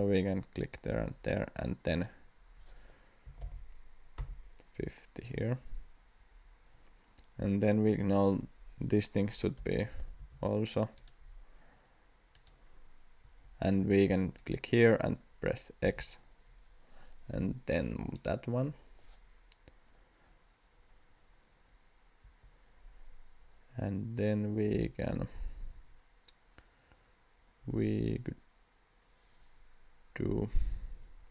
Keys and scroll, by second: 3.0-3.9 typing, 4.2 Return, 6.0 Escape, 9.6 l, 10.2 x, 13.2 Escape, 15.8 x, 22.2 Escape.